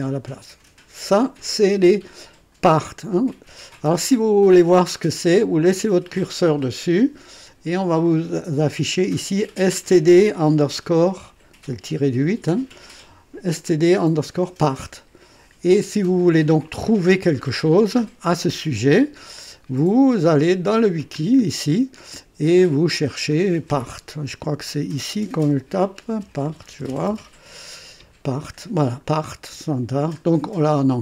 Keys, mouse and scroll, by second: 19.9 click, 21.1-21.4 scroll up 1, 23.3 click, 25.8-27.4 typing, 29.3-29.7 scroll down 1, 30.2 scroll up 1.